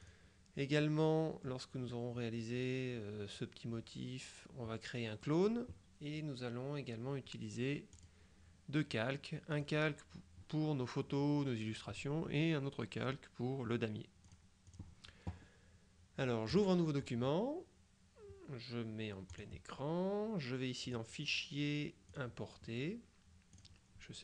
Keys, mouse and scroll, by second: 0.1 click, 0.8-2.0 middle drag, 8.0 click, 9.6 click, 14.3 click, 16.6 click, 19.4 click, 20.9 click, 22.2 click, 23.6 click.